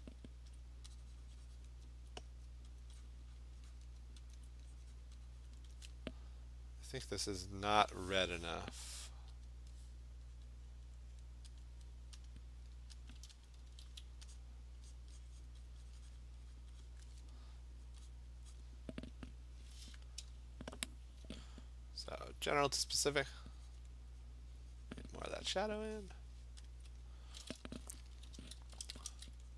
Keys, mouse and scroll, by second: 0.5 alt+click, 0.7 alt+click, 1.7 click, 1.9 alt+click, 2.1 alt+click, 2.5 click, 2.8 alt+click, 3.1 click, 3.4 click, 3.8 click, 4.0 alt+click, 4.4 alt+click, 5.1 click, 5.5 click, 5.8 click, 7.2 click, 9.5 click, 10.4 click, 10.7 click, 11.1 click, 11.6 click, 12.3 click, 13.1 click, 13.5 click, 13.6 Return, 14.4 click, 15.0 click, 15.3 click, 15.3 click, 15.5 click, 15.7 click, 16.2 click, 16.6 click, 16.8 click, 17.9 click, 18.1 click, 18.6 click, 22.3 alt+click, 22.5 alt+click, 22.6 click, 22.7 alt+click, 23.3 click, 23.8 click, 24.3 click, 25.0 click, 25.1 click, 25.3 alt+click, 25.6 click, 26.7 alt+click, 28.4 [, 28.6 [, 28.8 [, 29.1 [.